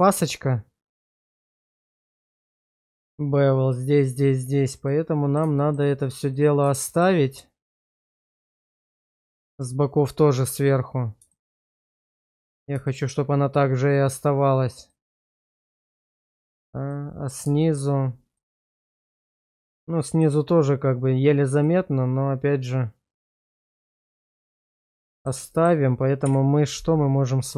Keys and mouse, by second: 2.6-3.0 shift+middle drag, 4.9-5.4 middle drag, 5.6 shift+middle drag, 6.3-6.6 middle drag, 6.8 shift+middle drag, 7.8-9.2 middle drag, 11.3 shift+middle drag, 11.8-12.4 middle drag, 12.9 shift+middle drag, 14.9-15.2 middle drag, 16.0 shift+middle drag, 16.9-17.4 middle drag, 17.6 shift+middle drag, 18.4-20.2 middle drag, 21.6-24.0 middle drag, 24.9-25.3 middle drag, 25.5 shift+middle click.